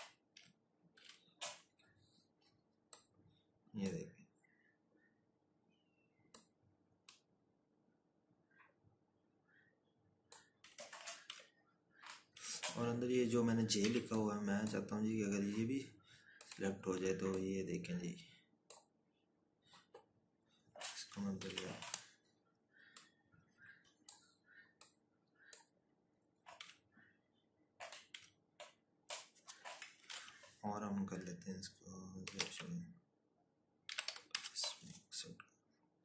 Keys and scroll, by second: 0.2-0.9 scroll, 10.5 Left, 11.5 Right, 13.0 z, 20.6 ctrl+shift+o, 26.6 Right, 27.3 Left, 29.3 ctrl+k, 31.2-33.6 typing.